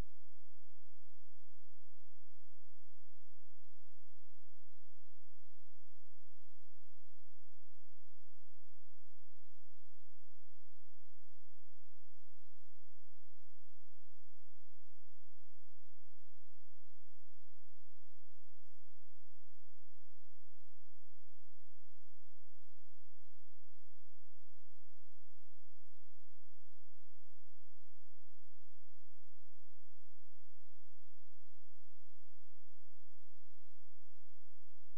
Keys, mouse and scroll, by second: 2.6 ctrl+z, 5.1 scroll up 1, 6.1-7.0 scroll down 1, 7.0-7.4 scroll up 1, 9.1 ctrl+shift+q, 10.3 shift+click, 12.1-12.6 scroll down 1, 12.6-13.5 scroll up 1, 13.5 click, 14.2-14.5 scroll up 1, 15.4 ctrl+shift+q, 17.2 shift+click, 19.8-21.3 shift+scroll down 1, 21.3 shift+click, 22.4 shift+right click, 23.0 shift+click, 24.6 shift+Delete, 25.7 ctrl+shift+click, 27.8-28.2 shift+scroll up 1, 28.2-28.6 shift+scroll down 1, 28.6-30.1 shift+scroll up 1, 30.7-31.1 shift+scroll down 1, 31.4-32.0 shift+scroll up 1, 32.0-33.8 shift+scroll down 1, 33.9 shift+click.